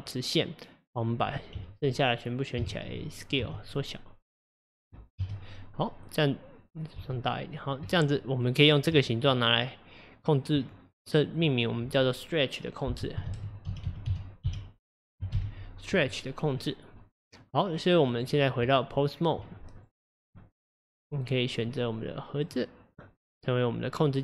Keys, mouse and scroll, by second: 2.6 a, 3.4 s, 5.2 KP_1, 6.0-6.6 scroll up 3, 6.6-7.0 scroll down 1, 7.0 s, 8.0-9.0 middle drag, 9.0 Tab, 11.4 click, 11.5-14.6 drag, 17.2 middle click, 18.1 click, 18.7 Tab, 19.8 click, 20.3 click, 21.6 click.